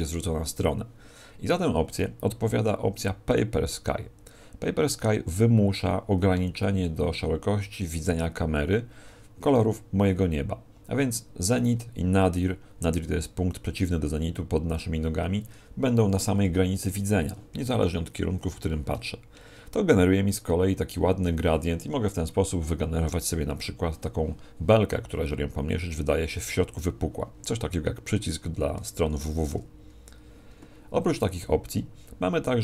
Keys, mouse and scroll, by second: 0.6 click, 3.3 click, 28.8 Escape, 29.8-30.3 scroll up 1.